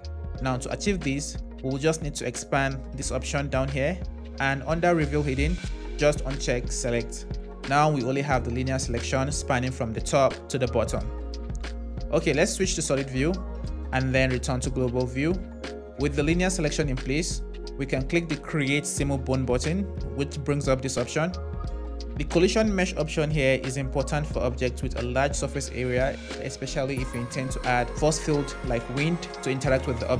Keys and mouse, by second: 6.4 click, 7.4 shift+z, 12.4 z, 17.9-30.1 drag.